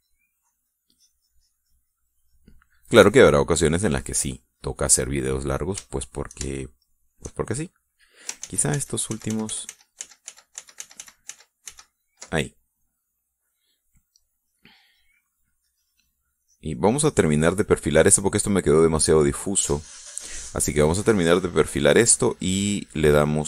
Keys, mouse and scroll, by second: 1.7-4.0 drag, 4.1-6.8 drag, 8.1 shift+middle click, 9.7 ctrl+z, 15.6-23.4 drag.